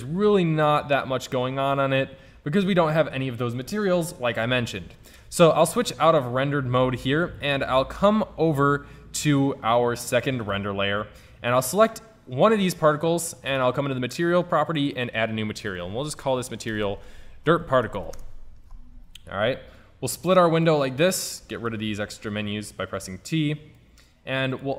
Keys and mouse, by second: 5.4 shift+z, 10.5 click, 11.2-13.3 drag, 11.7-13.3 right drag, 13.3 middle click, 13.5-14.9 drag, 17.4 click, 19.8 click, 21.4 t, 21.7 t.